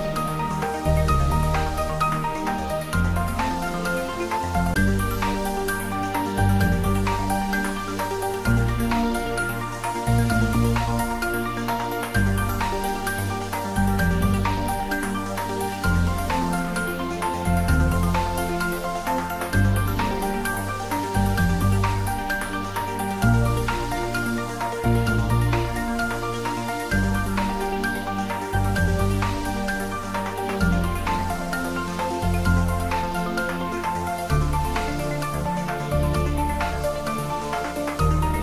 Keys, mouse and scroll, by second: 1.0 scroll down 1, 3.5-6.4 middle drag, 7.1-12.7 drag, 13.5-14.9 right drag, 14.9 click, 17.8 click, 17.9-21.2 drag, 21.2 shift+a, 26.7 click, 28.8-29.9 scroll down 2, 30.3 click, 38.2 shift+a.